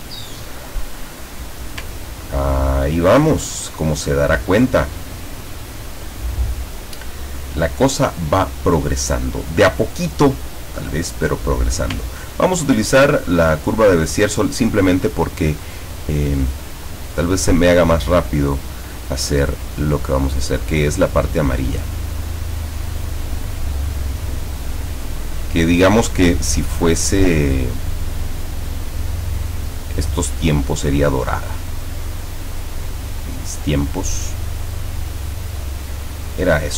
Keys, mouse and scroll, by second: 0.3-1.5 ctrl+middle drag, 2.2 ctrl+scroll up 2, 2.5-2.8 ctrl+scroll down 2, 11.2 click, 12.3 ctrl+scroll up 2, 13.1 ctrl+scroll up 2, 13.8 ctrl+scroll down 2, 21.5 click, 22.3 click, 27.5-28.7 drag, 29.7 click, 33.1 click, 36.4 click.